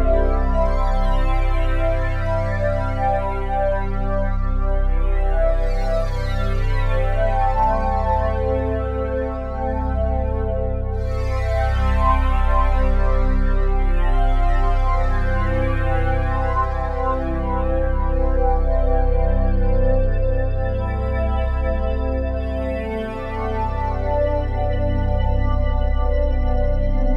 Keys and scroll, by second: 1.0 ctrl+z, 1.4 ctrl+z, 26.9 ctrl+z.